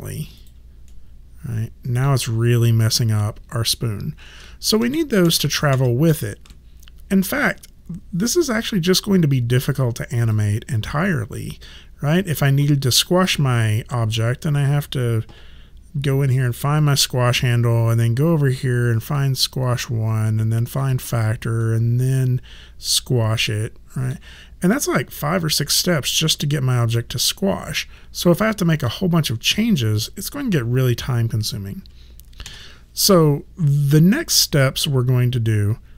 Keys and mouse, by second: 0.9 middle click, 4.3 ctrl+z, 10.2 click, 16.8 click, 19.1 click, 21.6 middle click, 32.5 ctrl+z.